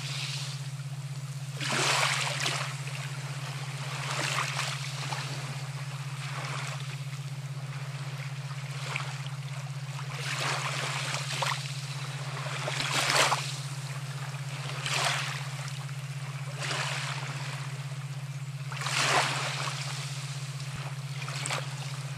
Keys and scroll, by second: 8.5 [, 18.3 space, 19.2-19.7 ].